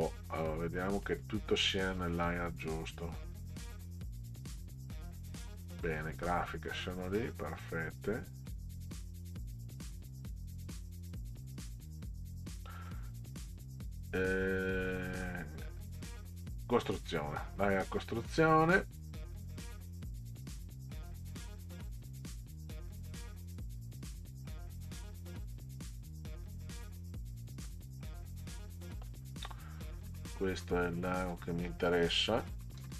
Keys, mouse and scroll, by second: 1.1 click, 6.1 click, 16.2 click, 24.4 click, 27.7-29.0 middle drag, 29.8 click, 32.8 ctrl+v.